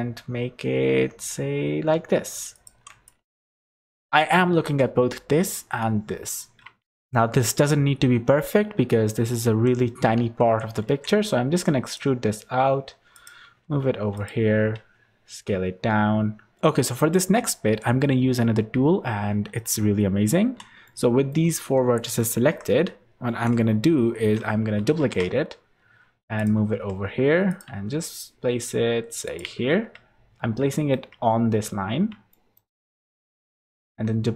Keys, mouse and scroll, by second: 3.0 click, 7.0 ctrl+z, 9.4 g, 10.8 e, 12.4 r, 13.4 g, 14.7 s, 18.1-19.4 scroll up 2, 20.8 middle click, 22.4 KP_3, 23.6 KP_1, 24.9 shift+d, 26.7 r, 27.6 g, 30.4-30.7 scroll up 3, 31.0 shift+middle click, 32.2 shift+middle click, 33.8 shift+d.